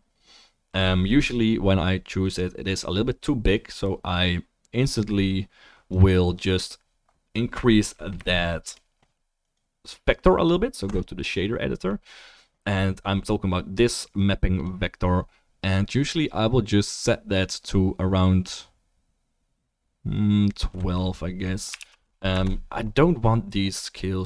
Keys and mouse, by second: 7.1-8.3 middle drag, 8.5-14.3 shift+middle drag.